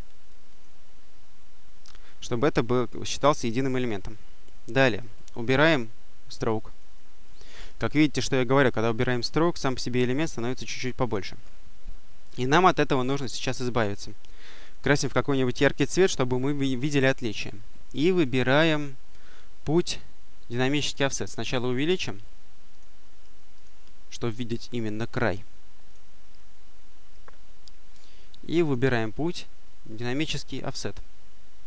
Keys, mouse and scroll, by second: 0.3 click, 4.9 right click, 6.5 click, 14.5 click, 18.1 click, 20.8 click, 21.5 click, 22.6 click, 23.4 click, 24.6 click, 25.7 click, 28.5 click, 30.0 click.